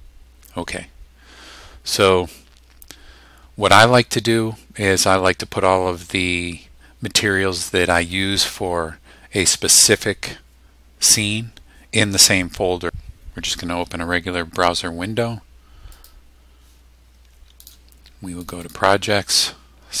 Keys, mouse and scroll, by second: 15.9 click, 17.6 click, 18.4 click.